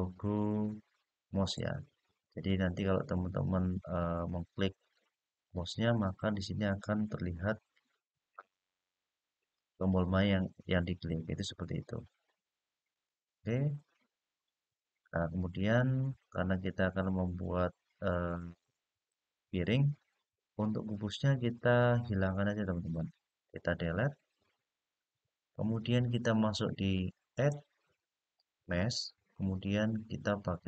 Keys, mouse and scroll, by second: 1.3 click, 12.7 click, 15.0-15.4 scroll up 2, 15.4-16.2 scroll down 4, 20.3-21.0 scroll up 1, 21.0 click, 24.3 Delete, 27.1-30.6 drag.